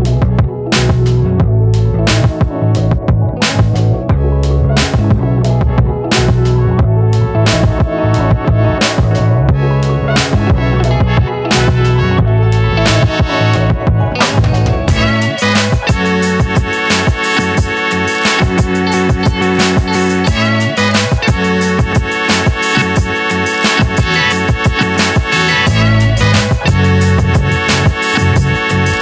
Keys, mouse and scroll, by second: 0.6 click, 0.6 Tab, 1.4 click, 7.4 click, 9.6 click, 22.3-29.0 drag.